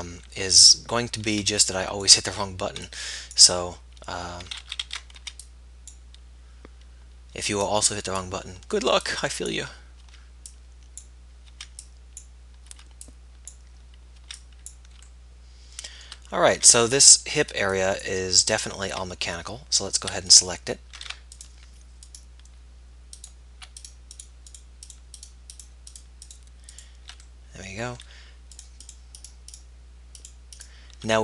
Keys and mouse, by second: 1.5 b, 2.8 b, 5.0 ctrl+z, 5.4 b, 7.6 b, 9.0 b, 10.2 b, 11.9 b, 12.9 b, 14.5 b, 15.3-18.9 middle drag, 16.9 b, 18.9 z, 20.5-22.3 drag, 29.4-31.2 middle drag.